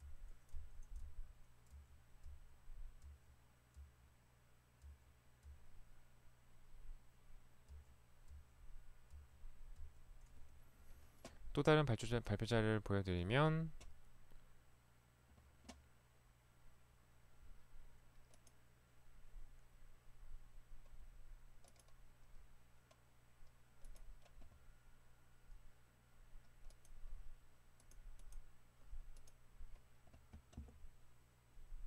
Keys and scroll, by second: 0.2 Right, 0.6 Right, 2.0 Right, 2.2 Right, 3.0 Right, 3.9 Right, 4.8 Right, 5.4 Right, 8.3 Right, 8.9 Right, 9.7 Right, 10.3 Escape.